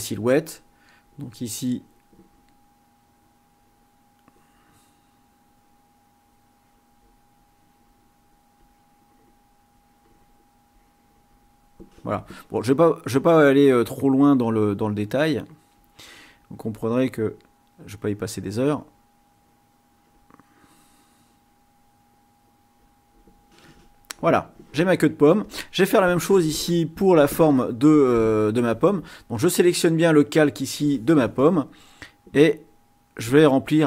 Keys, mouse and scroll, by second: 3.4 click, 6.5 click, 7.3 click, 8.5-9.6 drag, 9.7 click, 10.7 click, 14.0 click, 14.7 click, 15.9 click, 16.8 click, 18.1 click, 18.8 click, 19.3 click, 20.1 click, 21.3 click, 22.0-23.0 drag, 25.3 click, 29.4-30.7 drag, 32.5 click.